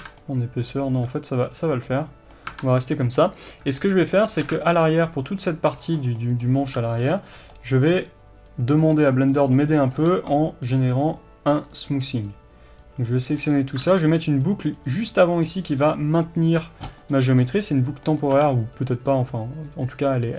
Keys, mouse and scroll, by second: 0.1 Tab, 2.6 Tab, 2.7 scroll up 1, 3.3-9.5 middle drag, 3.3 scroll down 2, 3.5 scroll up 3, 4.4-5.1 scroll up 4, 4.5 alt+a, 6.7-7.7 scroll up 2, 7.7 c, 9.5 right click, 9.7-13.2 middle drag, 10.0 c, 13.2 click, 13.4-13.9 scroll down 2, 13.9 ctrl+r, 17.1 click, 17.5-18.1 scroll up 1, 18.1-20.3 middle drag, 18.7 c.